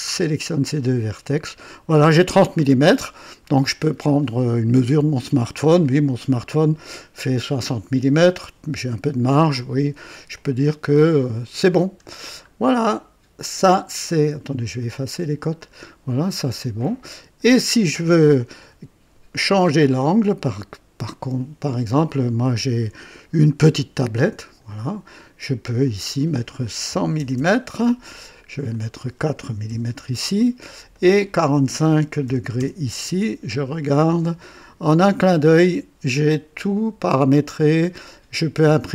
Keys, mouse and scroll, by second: 0.2 click, 10.3-11.9 drag, 12.0-12.7 scroll down 2, 14.7 click, 15.6 click, 16.2 scroll down 1, 16.7-17.6 drag, 24.4 click, 25.6 click, 26.9 KP_1, 27.1 KP_0, 27.3 KP_0, 28.7 click, 29.7 KP_4, 30.9 click, 30.9 typing, 32.0-32.5 typing, 32.5 KP_Enter, 34.0 click, 34.9-38.9 drag, 36.3-37.4 typing, 38.5-38.9 typing.